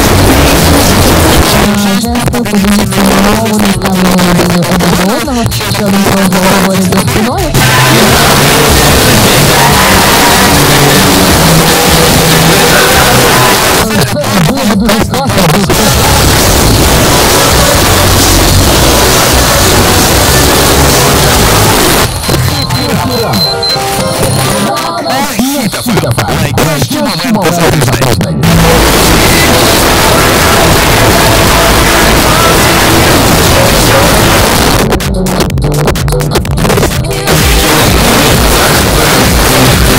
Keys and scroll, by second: 1.4 Page_Down, 13.5 Page_Down, 21.7 Page_Down, 34.4 Page_Down.